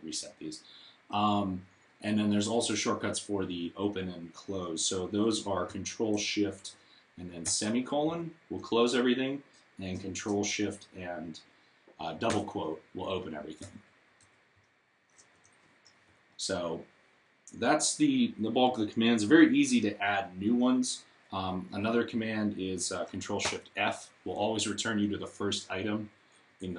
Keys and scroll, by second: 7.3 ctrl+;, 12.1 ctrl+', 13.4 ctrl+;, 13.8 ctrl+', 14.0 ctrl+;, 14.3 ctrl+', 23.3 ctrl+f.